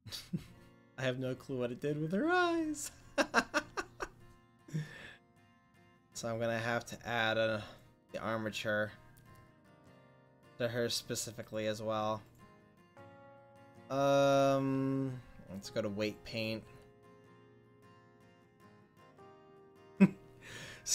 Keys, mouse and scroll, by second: 2.9 middle click, 5.1-9.7 drag, 12.4 click.